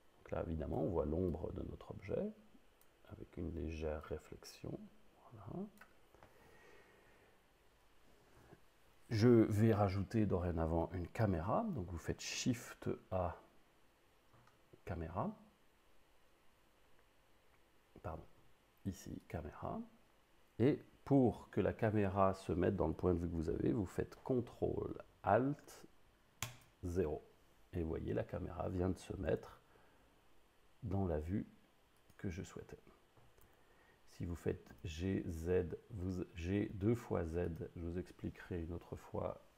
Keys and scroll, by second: 11.2 shift+a, 26.5 ctrl+alt+0, 29.3 g, 33.5 g, 34.7 z.